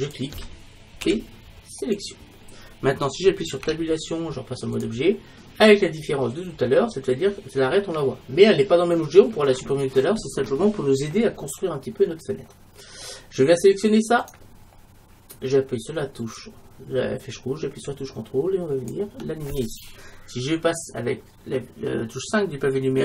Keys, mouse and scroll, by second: 0.2-1.9 drag, 1.1 p, 3.7 Tab, 6.0 click, 12.9-14.1 middle drag, 14.3-16.2 right drag, 16.4-18.3 drag.